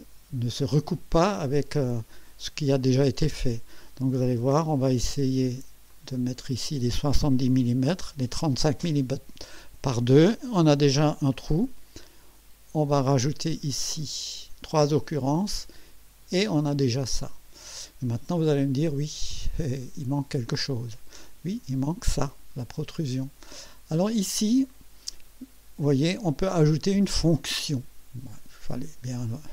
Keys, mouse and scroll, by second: 5.9 click, 7.5 7, 7.9 0, 13.9 click.